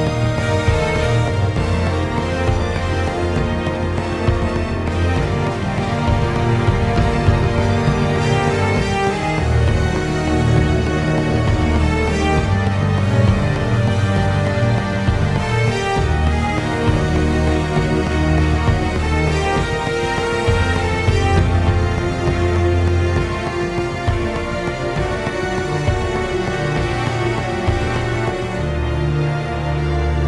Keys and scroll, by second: 5.6 ctrl+z, 11.8 ctrl+z, 19.4-19.9 ctrl+z, 24.8 ctrl+z, 24.8 ctrl+z, 26.6 ctrl+z, 26.8-28.8 ctrl+z.